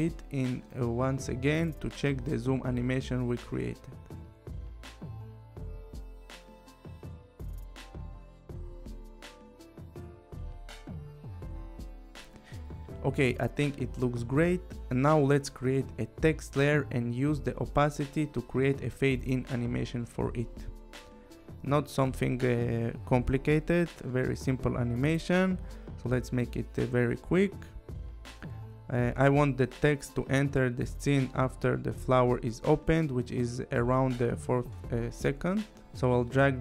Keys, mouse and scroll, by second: 14.9 space, 15.8 click, 17.0 click, 18.1 click, 19.4-20.7 typing, 22.6 click, 23.8 click, 26.1 click, 27.3 t, 28.0 click, 28.5 click, 30.7 click, 31.9 click, 34.3 click.